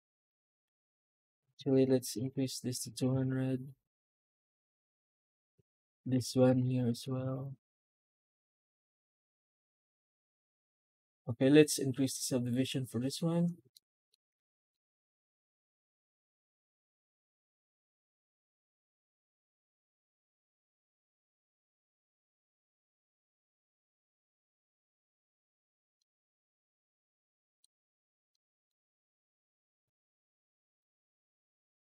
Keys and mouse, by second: 0.5 F9, 5.4 click, 5.6 Tab, 6.0 alt+shift+z, 6.3 a, 6.8 Tab, 13.6-14.0 middle drag, 14.6 middle click, 15.2 F9, 25.8-27.4 middle drag, 28.2-28.5 middle drag, 29.4 Tab, 30.0 a, 30.3 Tab, 30.7 alt+shift+z.